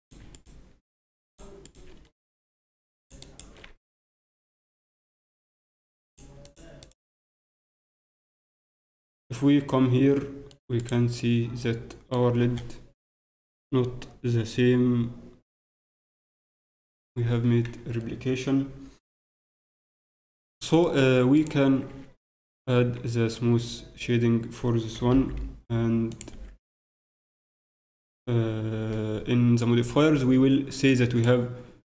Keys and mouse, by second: 2.6 click, 3.6-5.1 drag, 3.8 Tab, 6.0-8.0 drag, 7.0 t, 8.0 KP_Divide, 8.4 click, 10.8-12.7 right drag, 11.2 click, 12.7 middle click, 19.5-23.3 middle drag, 22.8 ctrl+Tab, 23.3 ctrl+Tab, 26.3-28.3 drag, 26.3 t, 30.9-31.8 drag.